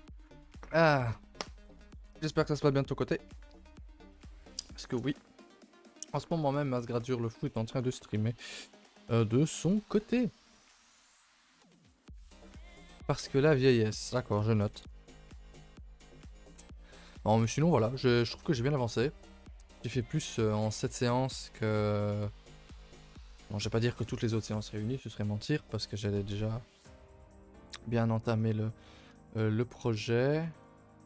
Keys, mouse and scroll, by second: 8.4 click, 8.7-9.3 scroll up 2, 9.3-9.6 middle drag, 14.0 scroll down 3, 14.5-14.9 shift+middle drag, 14.9 scroll up 1, 14.9 2, 15.1 a, 15.2 3, 16.0 z, 16.7-17.0 middle drag, 17.4 scroll down 2, 17.8 ctrl+s, 18.5-19.0 scroll down 2, 19.2-19.9 scroll up 1, 19.9-23.1 shift+middle drag, 28.1 scroll up 1, 28.3-28.6 scroll down 1, 28.6-29.3 scroll up 1, 29.3-29.7 shift+middle drag, 29.7-30.6 scroll down 2, 30.6-31.0 shift+middle drag.